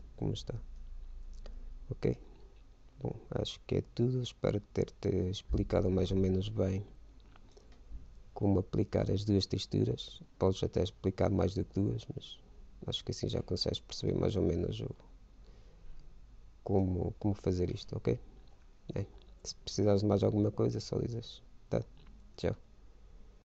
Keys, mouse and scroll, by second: 1.4-2.9 drag, 14.6-16.4 drag.